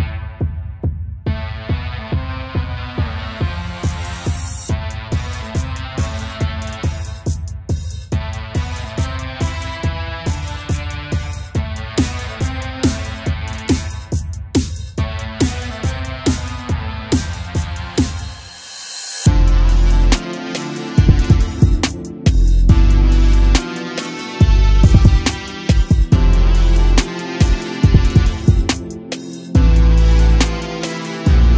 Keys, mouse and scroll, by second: 3.3 a, 3.5 a, 4.4-5.5 scroll up 1, 5.5 click, 9.2 click, 14.1-17.1 drag, 17.2 a, 17.3 a, 18.0 click, 19.3-21.7 drag, 21.7 a, 21.8 a, 23.8 click, 25.0-26.3 drag.